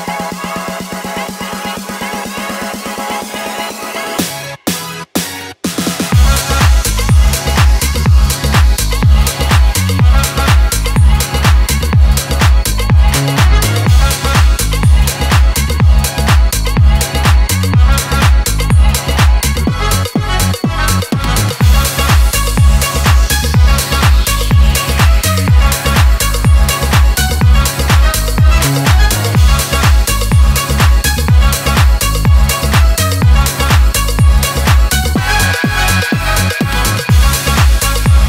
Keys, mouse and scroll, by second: 0.0-1.0 typing, 2.1 click, 6.0 ctrl+v, 7.3 click, 11.0 ctrl+v, 12.7 click, 16.2 Return, 18.6 ctrl+v, 19.4 ctrl+z, 20.1-25.4 typing, 27.8 click, 30.1 click, 30.7 shift+click, 35.4-36.4 middle drag, 38.0 click.